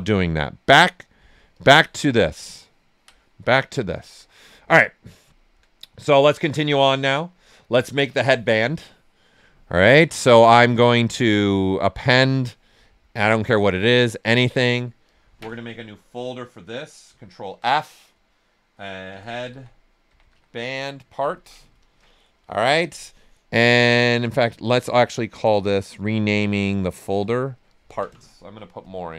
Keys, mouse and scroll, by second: 2.5 ctrl+right click, 3.5 right click, 3.8 alt+right click, 4.2 right click, 5.3 alt+right click, 9.4-10.8 drag, 17.0 click, 17.4 ctrl+f, 18.8-21.0 typing, 23.5 click, 27.1 click, 28.8 Right, 29.0-29.1 typing.